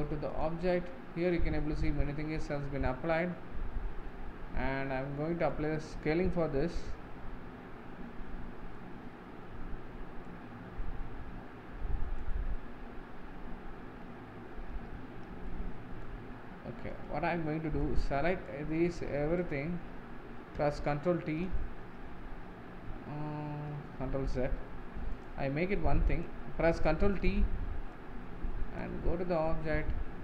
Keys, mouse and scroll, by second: 0.8-2.4 scroll down 8, 2.4-4.4 middle drag, 4.4-5.5 scroll up 10, 5.5-10.2 middle drag, 10.2-13.4 drag, 14.2 ctrl+z, 15.9-19.4 middle drag, 19.4 shift+click, 21.0 ctrl+t, 24.2 ctrl+z, 26.1 click, 27.2 ctrl+t, 28.3-30.2 drag.